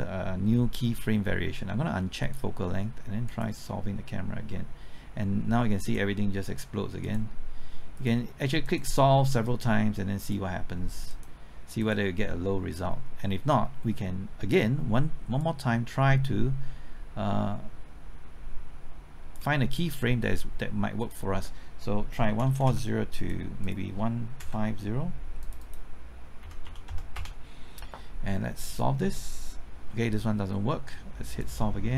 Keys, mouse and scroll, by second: 2.2 click, 15.4-19.7 drag, 22.2 KP_1, 22.4 KP_4, 22.6 KP_0, 23.2 click, 24.4 KP_0, 25.4 click, 26.4 KP_1, 26.6 KP_5, 26.8 KP_0, 27.1 Return, 28.7-29.7 drag.